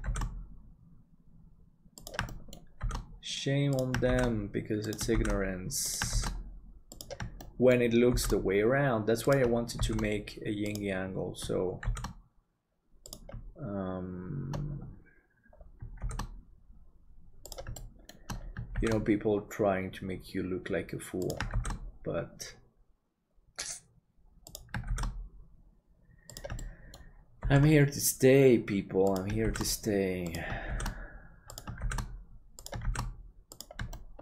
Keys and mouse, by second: 2.3 shift+middle click, 7.4 shift+middle click, 16.0 shift+d, 17.8 shift+middle click, 24.9 shift+d, 26.6 shift+middle click, 33.9 shift+middle click.